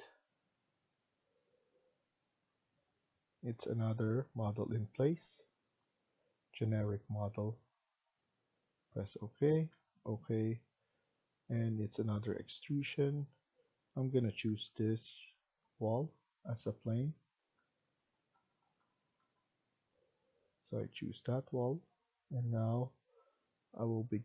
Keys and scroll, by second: 14.6 Tab, 15.2 Tab, 15.6 Tab, 15.9 Tab, 16.4 Tab, 16.9 Tab, 17.3 Tab, 18.1 Tab, 18.5 Tab, 19.1 Tab.